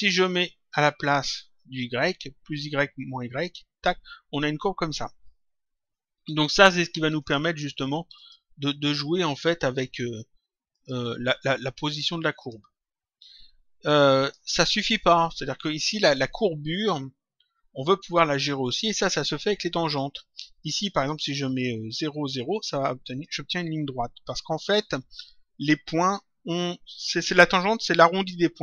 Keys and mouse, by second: 0.7 click, 3.2 click, 7.1 click, 9.3 click, 10.6 click, 12.3 click, 14.1 click, 19.2 click, 22.3 click.